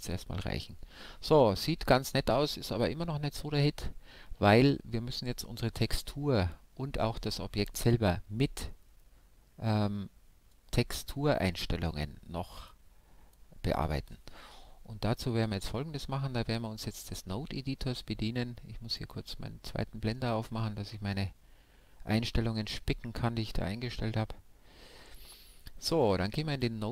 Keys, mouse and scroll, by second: 25.2-26.9 drag.